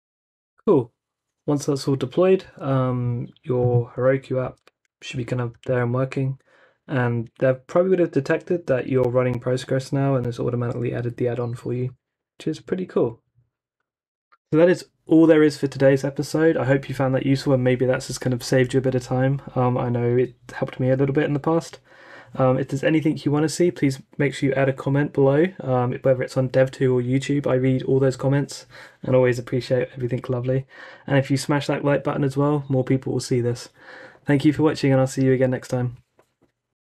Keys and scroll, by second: 0.0 super+r, 5.5 super+r.